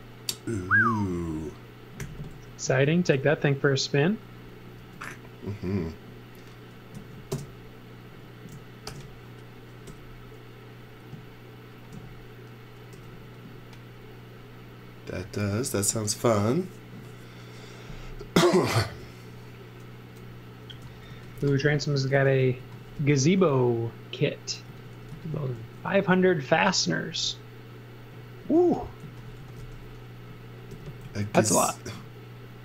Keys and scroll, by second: 2.0 m, 4.8 space, 6.9 super+x, 7.3 space, 8.3 space, 8.9 alt+shift+v, 9.8 m, 12.9 b, 20.8-22.9 typing, 24.6 x, 25.1 z, 25.6 f, 26.6 f, 28.4-30.7 typing.